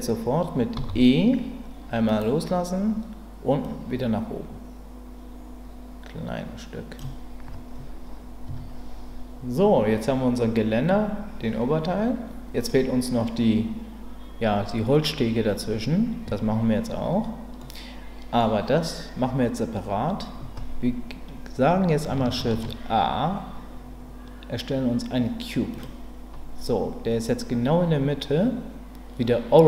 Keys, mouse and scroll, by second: 0.8 e, 3.7-7.0 drag, 8.5 Tab, 17.7 middle click, 22.4 shift+a.